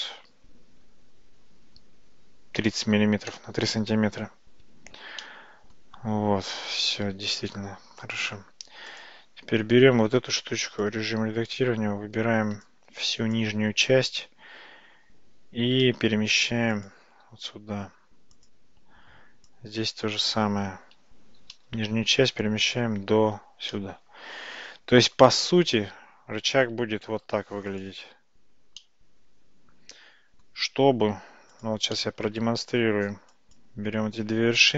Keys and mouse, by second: 4.7 Tab, 5.3 middle click, 6.4 Tab, 7.4 click, 8.0 click, 9.0 click, 10.2 Tab, 10.9 click, 12.8-13.8 drag, 15.7 g, 18.0 Tab, 19.2 Tab, 19.6 click, 21.4 g, 23.1 Tab, 23.8-25.2 middle drag, 27.4 alt+z, 27.8 click, 28.8-30.5 middle drag, 31.6 click, 32.0-32.4 middle drag, 32.8 Tab, 33.4 click.